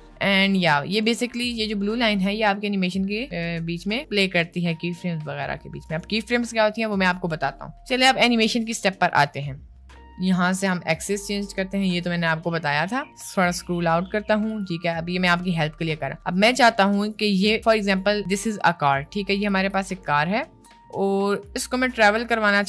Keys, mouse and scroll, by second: 1.2-6.8 drag, 11.3 click, 11.8 click, 14.4 click, 16.8 middle click, 18.9 click, 19.7 ctrl+z, 20.1 middle click, 21.3 click.